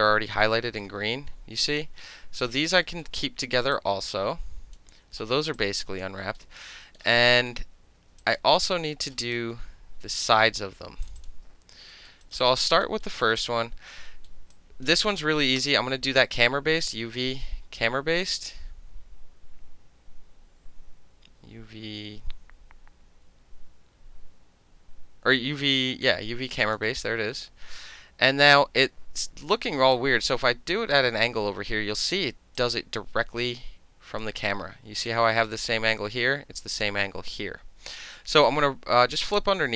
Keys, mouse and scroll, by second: 0.5 alt+middle click, 2.2 alt+middle click, 2.8 alt+middle click, 3.7-4.7 drag, 5.4 alt+middle click, 5.5 alt+click, 6.0 alt+middle click, 6.4 alt+middle click, 7.0 alt+middle click, 7.1 alt+right click, 7.2 alt+middle click, 8.2 alt+click, 8.6 alt+right click, 9.2 alt+click, 10.1 click, 11.0 shift+click, 11.2 shift+click, 11.9 alt+middle click, 12.2 alt+right click, 12.4 alt+click, 13.0 alt+middle click, 13.4 alt+click, 13.9 alt+middle click, 14.3 alt+middle click, 14.5 alt+click, 14.8-16.8 alt+middle drag, 15.6 space, 16.8-19.9 drag, 29.9-30.9 alt+drag, 31.4 space, 32.6-34.2 drag, 38.4-39.7 alt+drag.